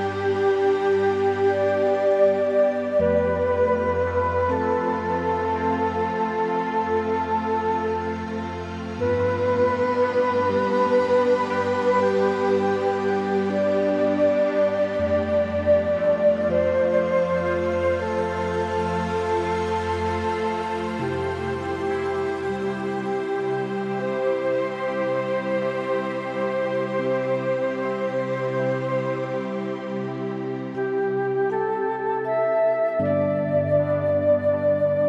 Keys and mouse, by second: 0.3 middle click, 0.5 shift+middle click, 1.2 Tab, 2.3 3, 2.7 shift+click, 3.2 click, 5.0 e, 6.4 click, 6.7 s, 7.4 Escape, 8.0 click, 9.0 s, 14.0 Tab, 14.2 click, 14.5 middle click, 14.9 click, 15.3 Tab, 15.5 middle click, 16.1 shift+middle click, 16.3 middle click, 18.9 e, 20.2 s, 22.0 click, 22.2 Tab, 22.3 click, 22.5 middle click, 23.1 middle click, 24.2 shift+middle click, 24.7 middle click, 25.2 shift+middle click, 25.4 middle click, 26.1 shift+middle click, 27.2 shift+middle click, 27.9 shift+middle click, 28.3 shift+middle click, 29.6 click, 30.1 click, 31.3 shift+middle click, 31.7 middle click, 32.5-35.0 drag.